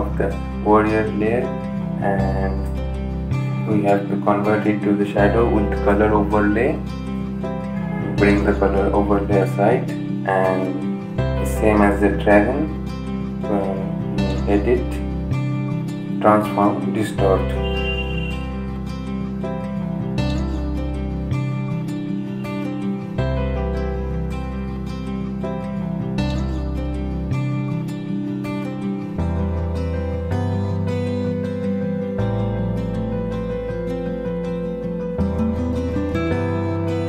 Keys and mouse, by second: 1.1 right click, 2.6 click, 8.0-30.8 drag, 30.8 Down, 35.4-37.0 drag.